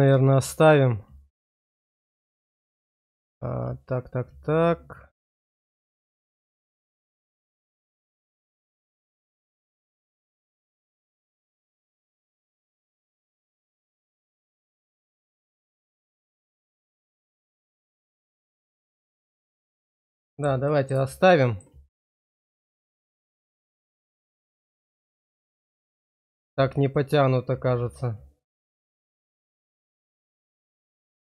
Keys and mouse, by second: 8.7 click, 11.4 ctrl+z, 12.4 shift+middle click, 15.1 click, 17.4 middle click, 19.5 middle click, 20.2 shift+middle click, 20.7 middle click, 21.0 shift+middle click, 22.3 Tab, 23.1 shift+middle click, 24.0-25.7 middle drag, 26.1 shift+middle click, 27.0-29.2 middle drag, 29.3 shift+middle click.